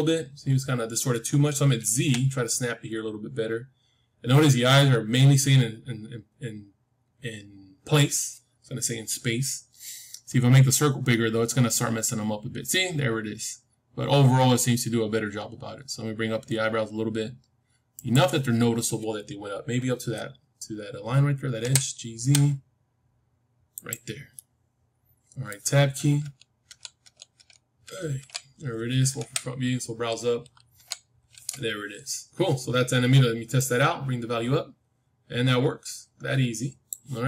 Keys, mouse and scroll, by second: 21.6 g, 24.2-26.3 middle drag, 26.1 Tab, 26.6 Tab, 27.0 Tab, 27.3 Tab, 27.8 Tab, 28.1 Tab, 29.1 KP_1, 30.7 Tab, 33.5-35.5 drag.